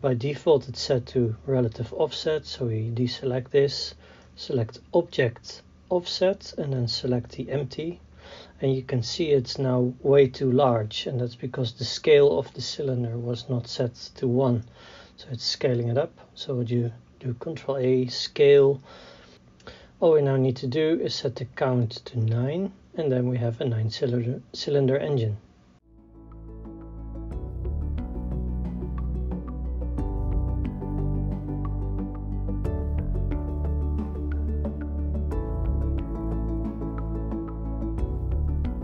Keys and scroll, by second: 15.2 ctrl+a, 16.1 o, 30.4-38.4 typing, 31.6 Tab, 33.9 Tab, 34.8 Tab, 35.5 Tab, 36.0 Tab.